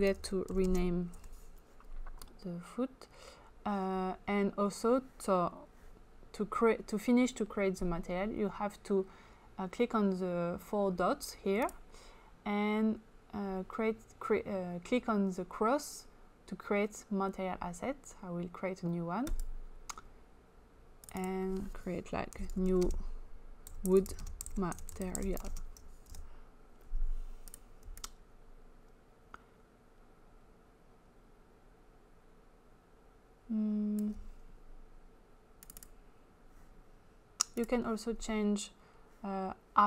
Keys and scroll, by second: 0.0-1.1 typing, 22.1-24.9 typing.